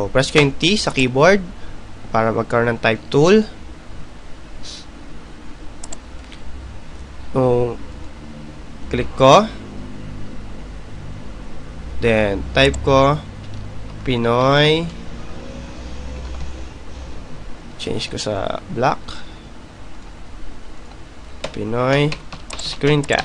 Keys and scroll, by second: 4.8 t, 18.0-19.5 typing, 20.6 ctrl+a.